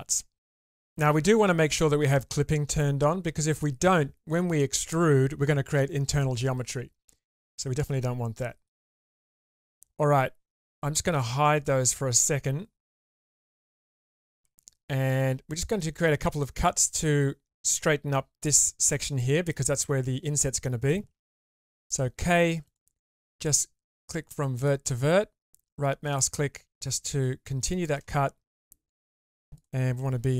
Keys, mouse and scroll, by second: 2.7 click, 7.5-8.0 middle drag, 8.4 shift+middle drag, 9.5 click, 14.0 click, 14.5 Tab, 15.1 middle click, 16.4 middle click, 19.2 shift+middle click, 19.8-20.9 middle drag, 21.5 k, 28.9 alt+click, 30.0 2.